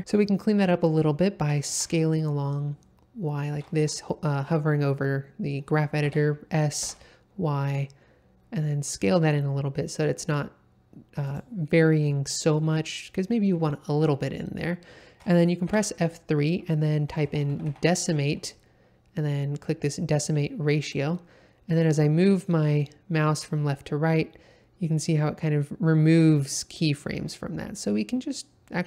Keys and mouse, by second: 1.4 s, 1.7 y, 3.8 Escape, 6.0 s, 6.8 y, 11.2 click.